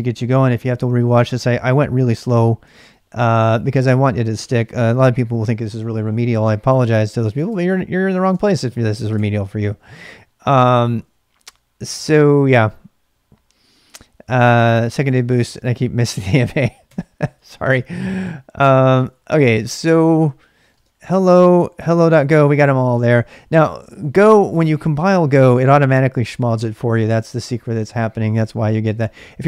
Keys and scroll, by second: 2.4-9.5 typing, 7.4 Tab, 16.8 Return, 17.4-22.6 typing.